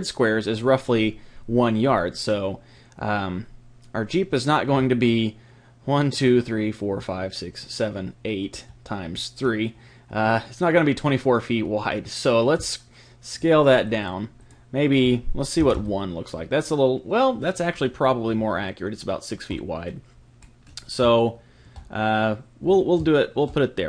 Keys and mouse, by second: 4.8-7.9 middle drag, 8.5-13.3 middle drag, 13.3-16.2 drag, 17.4-23.8 middle drag.